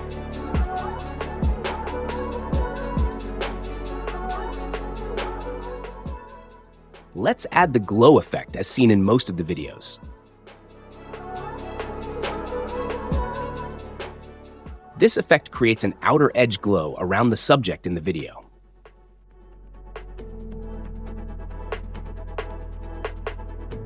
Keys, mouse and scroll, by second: 11.7 click, 12.4-13.8 typing.